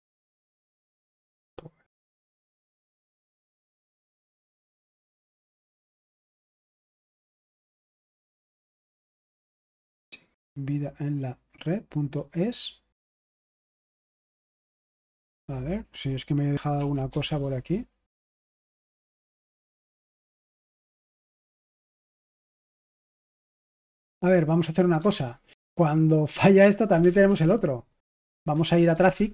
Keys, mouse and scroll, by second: 7.0 click, 8.5 click, 13.2 click, 13.5 click, 15.3 click, 16.8-17.6 typing, 18.1 Return, 21.6 click, 22.5 BackSpace, 22.7 Return, 25.1 super+h, 26.6-29.3 typing.